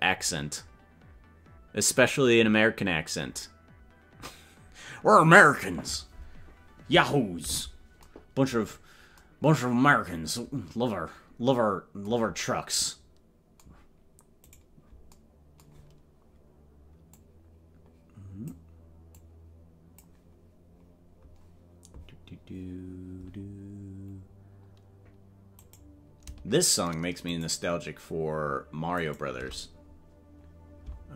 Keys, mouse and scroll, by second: 8.8 scroll up 4, 9.9 scroll down 2, 14.6 right click, 17.1-18.6 drag, 19.2-20.2 drag, 23.6 scroll up 1, 24.3 scroll down 1, 24.7 scroll down 1, 25.7 right click, 27.3-29.7 shift+right drag.